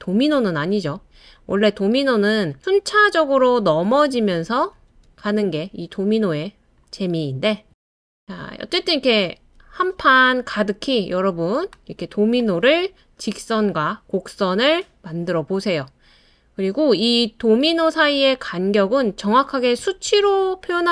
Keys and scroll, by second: 3.9 super+d, 4.3 super+d, 4.5 super+d, 7.7 super+d.